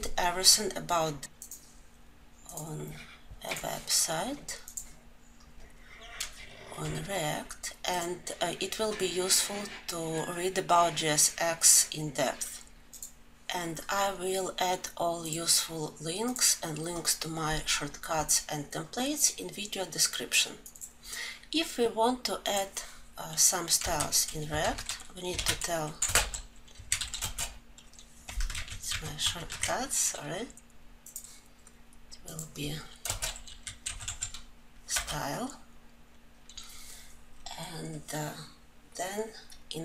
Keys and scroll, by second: 24.4 ctrl+;, 28.3 ctrl+z, 29.0 ctrl+z, 34.8 Return.